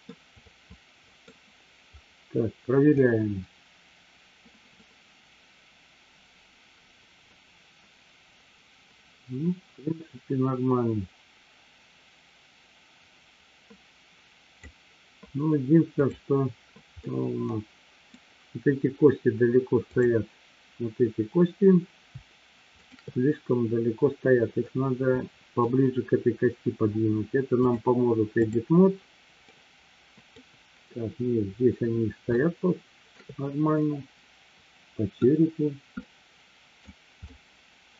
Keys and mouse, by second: 0.1-1.2 middle drag, 2.9-15.2 drag, 16.1 click, 17.1-18.2 middle drag, 19.8 click, 24.6-25.6 middle drag, 27.7-28.9 drag, 29.6-30.3 middle drag, 32.3-33.2 shift+middle drag, 33.8-35.2 middle drag, 36.1 middle click, 37.2-37.9 middle drag.